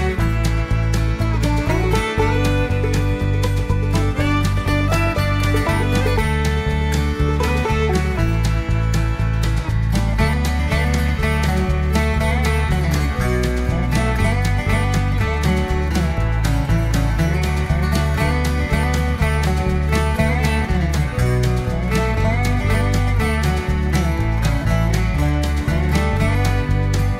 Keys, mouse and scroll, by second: 0.2 click, 2.0 click, 4.3 click, 8.5 click, 9.7 click, 11.2 ctrl+v, 12.7 click, 14.1 ß, 15.1 click, 16.3 click, 17.3 click, 18.5 click, 19.5 ctrl+v, 20.5 click, 21.8 ß, 23.8 Right, 24.0 Right, 26.3 click.